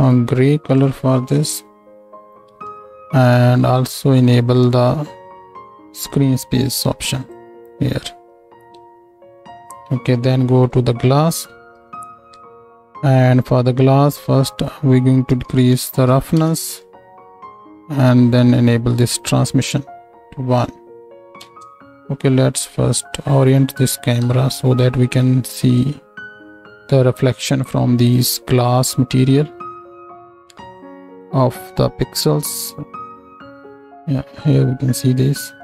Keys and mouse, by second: 3.2 n, 7.4-9.6 drag, 8.4 n, 11.8-21.2 drag, 14.6-21.2 middle drag, 14.6-21.2 right drag, 21.4 ctrl+space, 24.2 n, 28.7-33.0 middle drag, 33.0 right click, 33.5 ctrl+click, 34.3 right click, 34.6-35.6 drag.